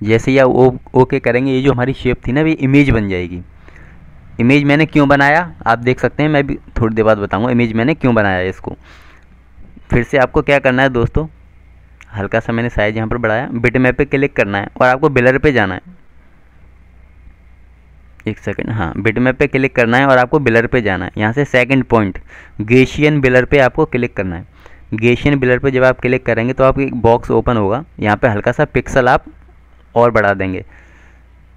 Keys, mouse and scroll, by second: 2.3 click, 4.5 double click, 5.0 click, 7.6 double click, 8.2 click, 11.6 shift+click, 13.0 click, 26.6 click.